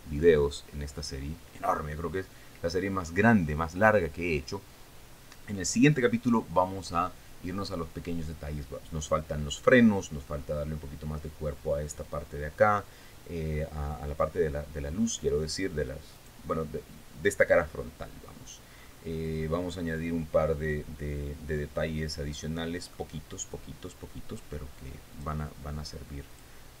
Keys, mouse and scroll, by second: 16.7 right click, 17.9-18.3 scroll up 2, 18.3-18.7 scroll down 2, 19.3-19.7 scroll up 2, 20.0-20.4 scroll down 2, 21.1-23.7 middle drag, 23.8 scroll down 2, 25.7 click.